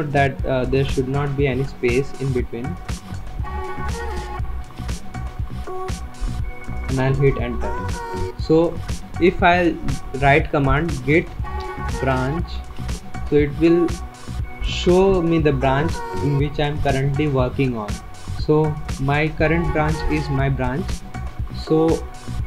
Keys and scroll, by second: 0.0-1.9 typing, 3.0 BackSpace, 3.3 BackSpace, 4.5-5.2 typing, 7.0 Return, 10.7-13.0 typing, 14.9 Return.